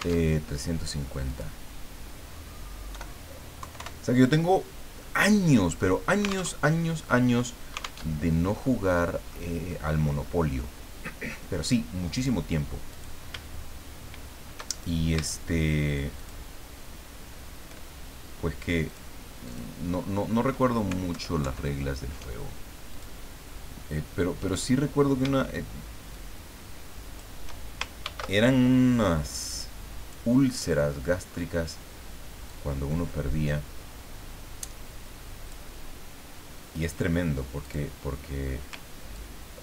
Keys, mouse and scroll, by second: 0.2 alt+Tab, 1.3 click, 2.9 Delete, 3.6 KP_3, 3.8 KP_5, 5.0 click, 6.5 alt+Tab, 8.1 alt+Tab, 8.6 click, 9.7-10.9 drag, 12.1 click, 12.9 click, 14.7 shift+click, 16.2 shift+click, 18.8 click, 19.4 click, 21.1 alt+Right, 22.9 click, 24.4 click, 26.1-27.3 shift+drag, 28.0 ctrl+d, 29.5-30.6 drag, 32.5-35.7 drag, 37.6 click, 39.1-39.6 ctrl+drag.